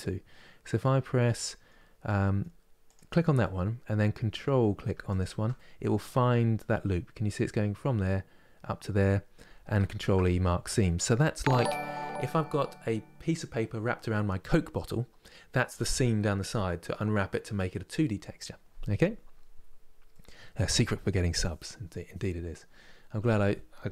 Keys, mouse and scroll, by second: 2.5 click, 3.1-4.7 middle drag, 4.7 ctrl+click, 5.2-8.2 middle drag, 9.6 ctrl+e, 19.7-23.9 middle drag.